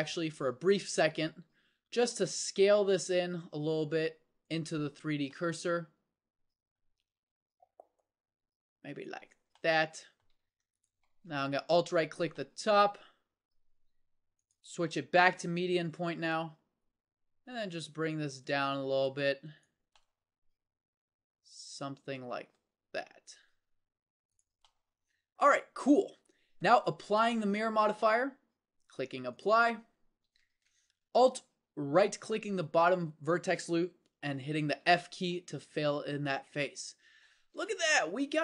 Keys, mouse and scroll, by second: 1.9 s, 7.2 s, 23.4 s, 26.2 Tab, 30.5 Tab, 34.8 f, 37.4 Tab.